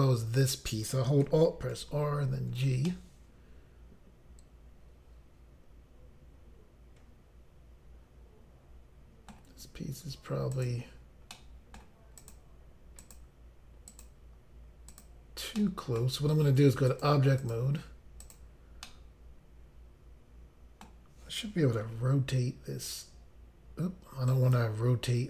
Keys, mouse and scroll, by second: 1.7 alt+r, 2.9 alt+g, 2.9 middle click, 10.5 click, 10.7 click, 11.3 middle click, 12.2 click, 12.3 click, 13.0 click, 13.1 click, 13.9 click, 14.0 click, 14.9 click, 15.0 click, 15.6 middle click, 16.9 click, 17.4 click, 17.6 double click, 18.2 double click, 18.4 double click, 18.9 middle click, 21.9 r, 24.3 right click.